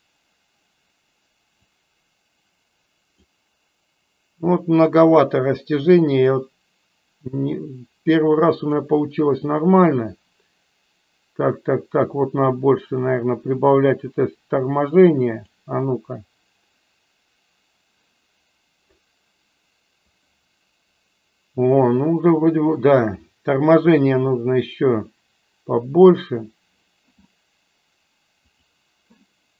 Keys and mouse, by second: 1.7-3.3 drag, 6.2-9.0 drag, 13.9-15.6 drag, 24.0-26.2 drag, 28.5 click.